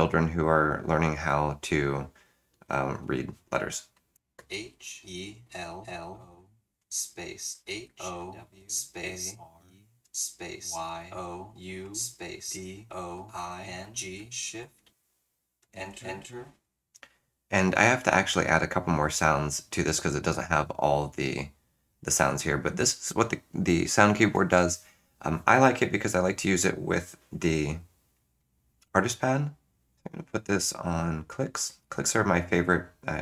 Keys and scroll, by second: 4.2 BackSpace, 4.4 h, 5.5-10.6 typing, 11.9-14.9 typing, 15.7 Return, 15.9 Return.